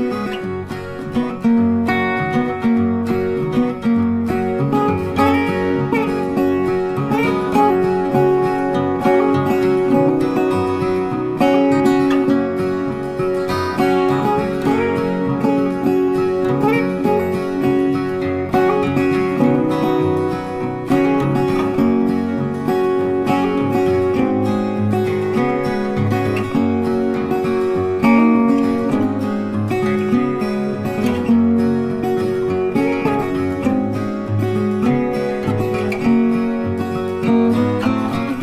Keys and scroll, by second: 5.9 ctrl+t, 23.8 ctrl+t, 37.8 ctrl+t.